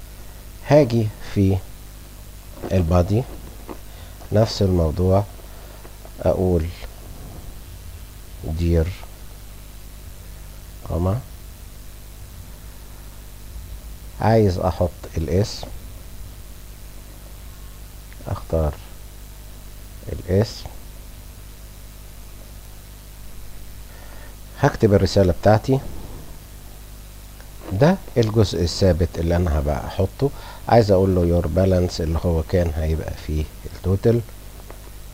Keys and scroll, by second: 8.7 Tab, 8.8 Caps_Lock, 9.6 Caps_Lock, 10.0 r, 10.5 h, 26.3 shift+y.